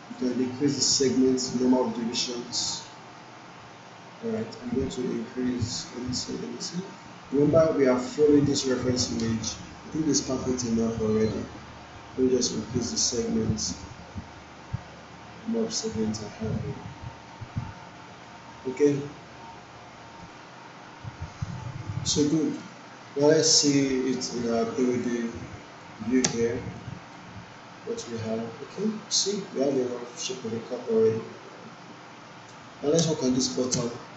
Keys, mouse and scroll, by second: 0.9-4.6 drag, 5.2-5.8 drag, 6.6-7.2 click, 7.4-8.3 drag, 12.8-15.9 drag, 20.2 click, 21.9-22.8 alt+middle drag, 24.8-26.0 drag, 26.2 space, 27.1-28.0 alt+right click, 28.2-29.4 alt+click, 29.5 alt+middle click, 29.9-32.7 alt+drag, 33.7 space.